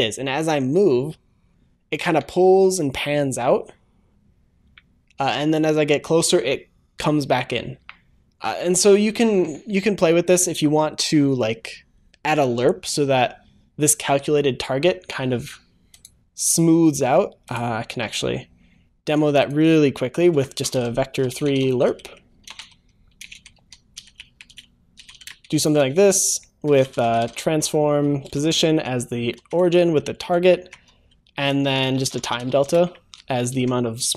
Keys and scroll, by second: 28.6 Return, 29.3 ctrl+s, 33.5 ctrl+s.